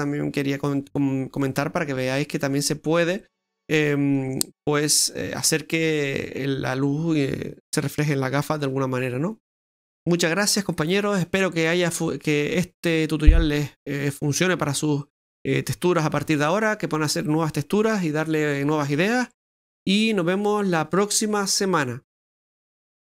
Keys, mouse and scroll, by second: 9.0-9.7 scroll down 4.